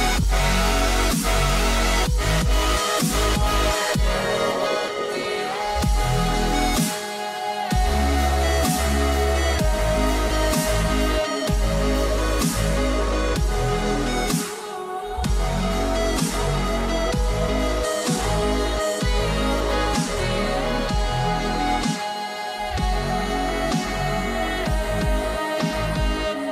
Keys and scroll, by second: 14.3 ctrl+alt+shift+e, 15.6 ctrl+shift+a, 18.9 h.